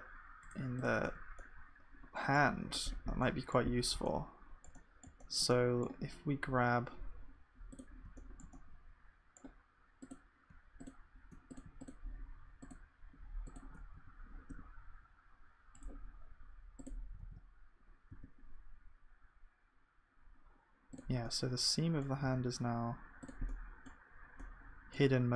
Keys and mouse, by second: 1.1 Tab, 2.0-3.4 drag, 3.4 middle click, 9.3-17.2 drag, 17.2 g.